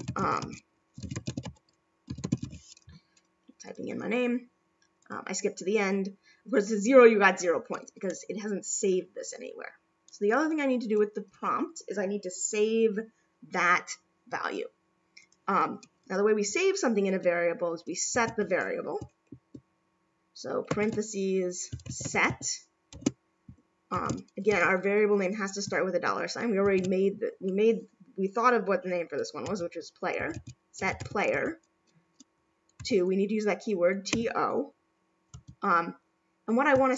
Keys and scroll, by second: 20.7 shift+9, 23.9 shift+;, 26.6 4.